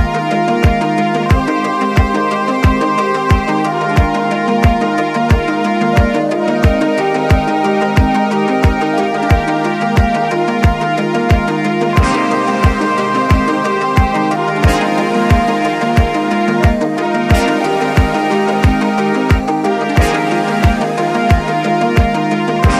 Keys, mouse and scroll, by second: 2.9 x, 6.1-7.5 drag, 9.3-12.3 drag, 13.7-14.7 drag, 14.7-18.6 right drag, 18.6 click, 19.5 shift+middle click, 20.2-21.7 scroll up 2, 21.7-22.7 drag.